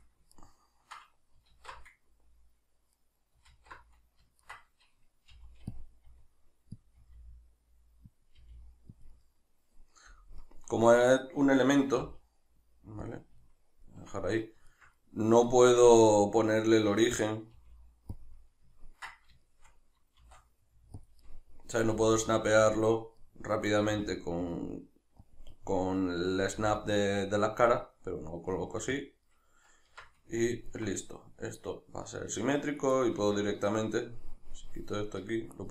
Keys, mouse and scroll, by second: 0.0-0.3 middle drag, 3.5 alt+q, 4.4 ctrl+middle click, 5.3 g, 5.8 click, 6.0 r, 6.8 click, 7.0 r, 8.2 click, 8.4 g, 9.0 click, 9.1-18.3 middle drag, 10.2 KP_Decimal, 12.0 g, 13.1 click, 17.5 g, 18.3 click, 18.3-21.1 middle drag, 20.2 shift+d, 21.1 click, 21.3-22.8 middle drag, 21.9 g, 22.8 click, 23.2-25.4 middle drag, 23.9 r, 25.4 click, 25.5-27.7 middle drag, 26.5 g, 27.7 click, 27.7-29.1 middle drag, 28.5 g, 29.1 click, 29.3-32.9 middle drag, 29.9 Tab, 32.9 right click, 34.4-35.5 drag, 35.5 shift+right click.